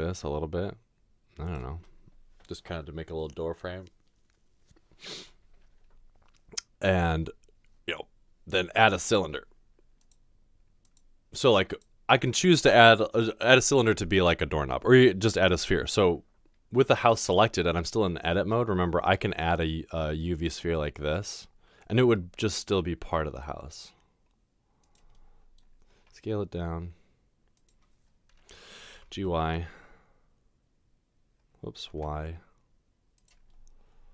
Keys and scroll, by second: 18.4 a, 22.1 g, 26.0 s, 28.9 typing, 31.9 typing.